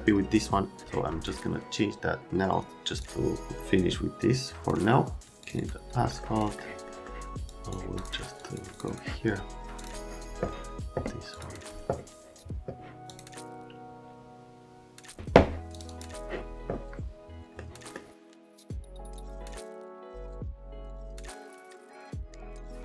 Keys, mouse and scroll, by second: 3.0 click, 5.4 click, 5.5 click, 6.3 right click, 6.8 right click, 7.5 click, 7.9 click, 8.4 click, 17.6 scroll up 1, 18.2 Delete, 18.3 scroll up 1, 18.4 Delete, 18.5 click, 18.7 click, 18.8 click, 18.9 Delete, 19.0 right click, 19.1 click, 19.2 right click, 19.3 click, 19.3 right click, 19.6 Delete, 19.7 click, 19.8 click, 19.9 click, 20.0 click, 20.1 Delete, 20.2 click, 20.5 click, 20.6 Delete, 20.6 right click, 20.7 click, 20.7 click, 20.9 click, 20.9 Delete, 21.0 middle click, 21.1 middle click, 21.6 middle click, 22.1 right click.